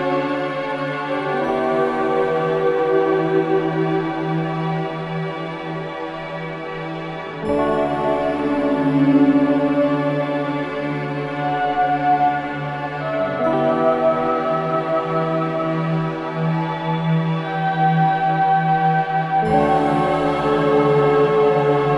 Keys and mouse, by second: 1.4 click, 2.7 click, 3.7-6.1 drag, 5.4-6.4 typing, 7.6-7.9 typing, 8.9 click, 9.9 typing, 10.0 click, 11.0-13.1 drag, 13.2 typing, 14.3 typing, 14.7-21.9 drag.